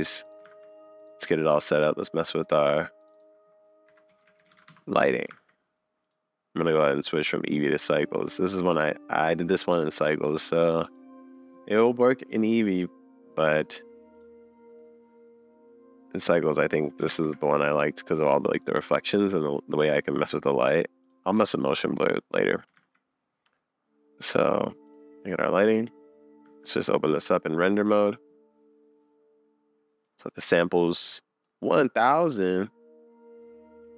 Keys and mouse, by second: 0.5 super+s, 1.8 click, 3.0-4.7 drag, 5.3 super+s, 6.7 click, 10.4 click, 14.2-17.2 drag, 19.9 click, 20.6 click, 21.0 click, 21.5 click, 22.8 super+s, 24.9 click, 25.7 drag, 26.4 z.